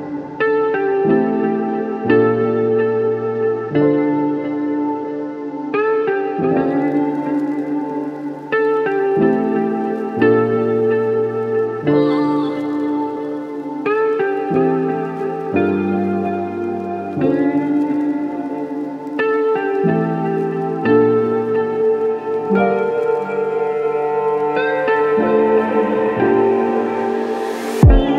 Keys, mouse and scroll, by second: 0.9 click, 1.3 click, 5.0-7.0 alt+middle drag, 7.6 click, 9.0 click, 11.0 click, 12.0 click, 12.6-17.9 drag, 13.9-17.6 typing, 17.8 Return, 19.0 click, 26.5 click, 27.5-28.1 drag.